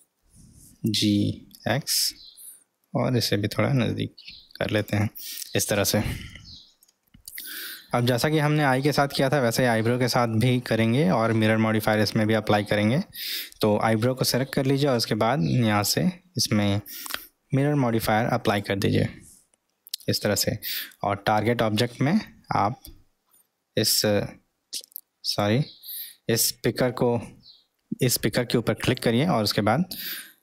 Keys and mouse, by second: 0.7 g, 6.4 middle click, 8.3-10.3 middle drag, 18.6 click, 21.2-25.5 drag, 28.8 click.